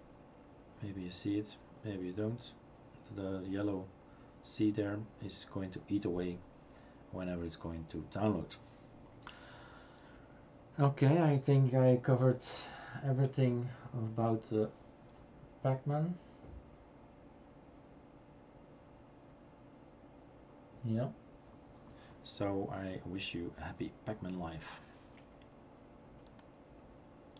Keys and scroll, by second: 0.0-0.4 typing.